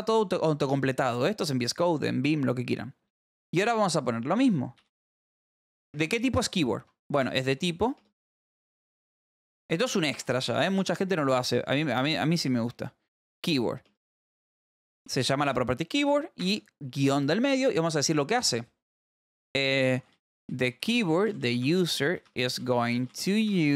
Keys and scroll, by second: 0.2 Return, 0.6 space, 4.5-5.8 typing, 7.3 ], 7.6 Left, 7.9 space, 8.7 BackSpace, 8.9 Right, 9.0 space, 9.7 Left, 10.1-11.8 typing, 12.2 Down, 12.6 Return, 13.1 Right, 13.8-16.5 typing, 19.8-23.7 typing.